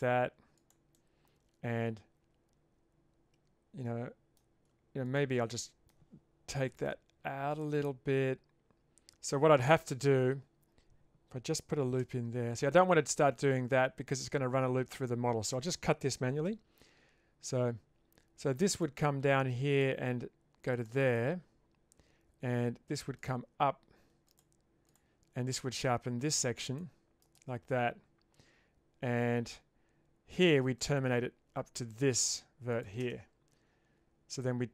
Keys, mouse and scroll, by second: 0.9-4.4 middle drag, 5.1 alt+click, 5.6 middle click, 6.6 g, 7.8-9.9 middle drag, 12.0 ctrl+r, 16.5 k, 34.5 middle click.